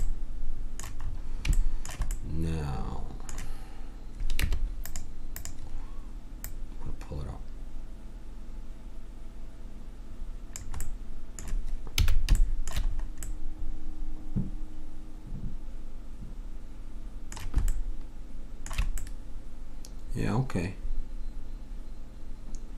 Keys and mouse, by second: 4.3 Tab, 5.9-7.4 middle drag, 10.8 middle click, 12.0 a, 15.1-17.7 middle drag, 22.3-22.7 middle drag.